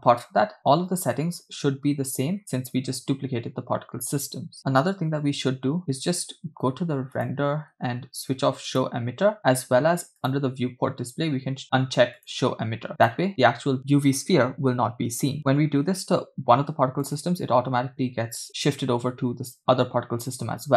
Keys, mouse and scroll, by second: 0.8-2.4 scroll down 9, 2.5 scroll up 2, 7.3 click, 7.9 scroll down 3, 8.8 click, 10.4 click, 10.7 scroll down 3, 12.3 click, 13.3 click, 15.4-17.2 scroll up 7, 17.3 click, 17.8-18.5 scroll down 5, 19.0-20.7 scroll down 3.